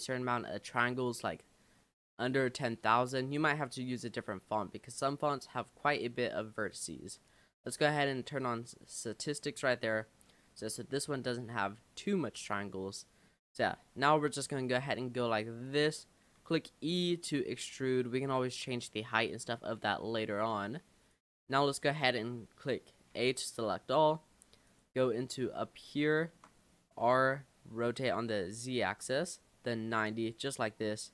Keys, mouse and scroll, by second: 0.3 scroll up 2, 1.1 click, 3.4 click, 5.5 click, 6.6-9.4 drag, 10.0-11.0 scroll down 4, 11.0 a, 11.6-13.3 middle drag, 13.3-13.7 scroll up 2, 13.7 middle click, 14.1-14.5 scroll down 1, 14.6-15.7 middle drag, 15.7 click, 16.4 e, 19.0 middle click, 19.4-19.9 scroll down 4, 19.9-21.1 middle drag, 21.1 click, 23.1 a, 24.7 click, 25.3-25.8 scroll down 5, 26.0-27.0 shift+middle drag, 27.0 r.